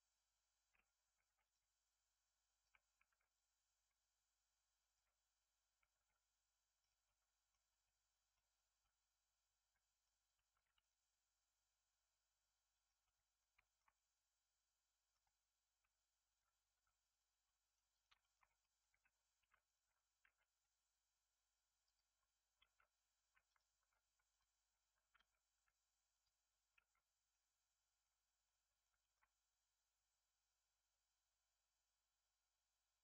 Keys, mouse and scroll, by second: 1.2 ctrl+r, 3.0 ctrl+r, 7.0 middle click, 7.6 scroll up 1, 7.8 middle click, 8.5-8.8 scroll down 1, 8.8-10.5 middle drag, 10.5 ctrl+r, 13.0-15.8 middle drag, 15.8 Tab, 16.2 click, 16.7 x, 17.4-17.8 middle drag, 17.8 click, 18.1 shift+middle drag, 18.4 scroll up 3, 18.5 middle drag, 18.8 Tab, 19.1 scroll up 1, 19.3 2, 19.6 alt+click, 20.1 g, 22.5 alt+z, 23.4 alt+click, 24.2 alt+click, 25.1 x, 26.7 alt+z, 26.9 scroll down 1, 27.2 middle click, 28.1 scroll down 2, 28.4-29.4 middle drag, 29.4 scroll down 1, 29.4-32.4 middle drag.